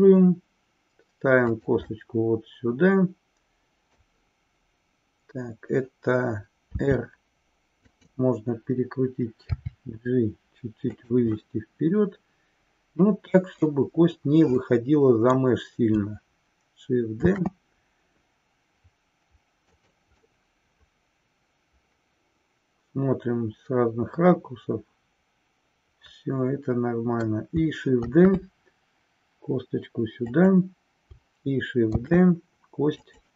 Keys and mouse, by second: 1.5 click, 2.0-4.1 middle drag, 8.0 click, 11.4-13.7 middle drag, 14.6 middle click, 17.1 shift+d, 19.9 click, 20.3-27.1 middle drag, 28.0 shift+d, 30.4 click, 32.0 shift+d, 33.1 click.